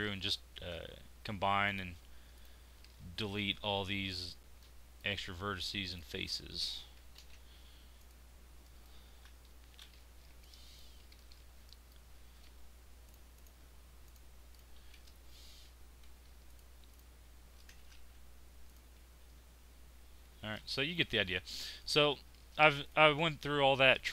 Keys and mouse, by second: 3.7 z, 4.4 z, 7.1 alt+m, 15.4 e, 17.9 ctrl+z, 19.7 f, 20.2 Tab.